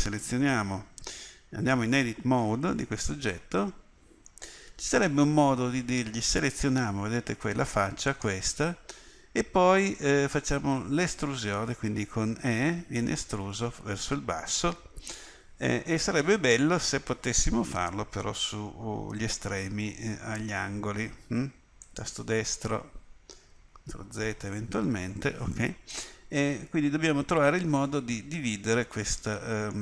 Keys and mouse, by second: 1.9 Tab, 12.4 e, 23.7 ctrl+z, 28.4 middle click.